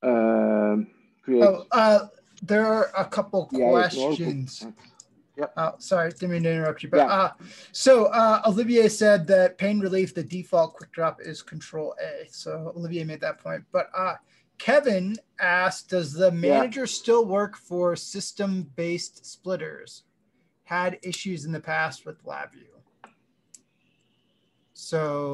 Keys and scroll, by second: 4.0 ctrl+space, 4.0 ctrl+v.